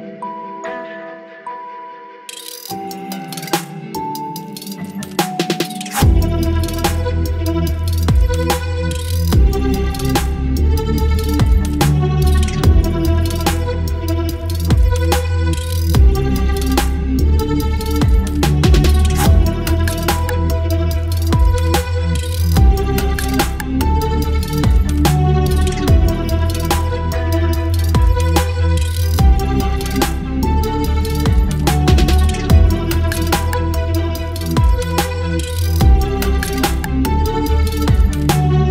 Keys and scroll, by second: 1.7 Delete, 3.2 Delete, 4.2 space, 4.8 v, 6.5 ctrl+e, 8.4 ctrl+j, 15.4 ctrl+i, 23.3 v, 33.4 Return.